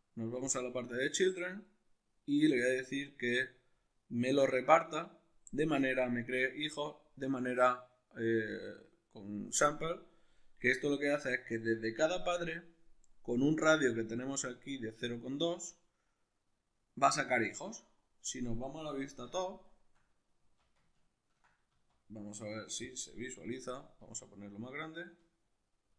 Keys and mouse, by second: 0.5-1.3 drag, 1.3-2.8 middle drag, 2.8 click, 8.4-15.6 middle drag, 15.6-19.6 shift+drag, 19.0 alt+q, 19.6-24.3 shift+middle drag, 20.4 z, 21.7 z, 24.3-25.9 shift+drag.